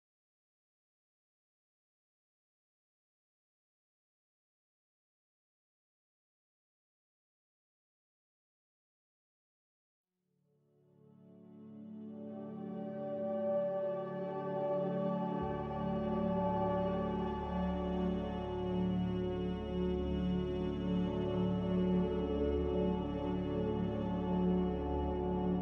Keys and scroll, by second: 2.6 g, 8.9 x, 10.9 z, 11.3 x, 12.4 6, 12.8 Return, 12.8 0, 16.2-17.7 typing, 20.7 z, 21.8 Escape.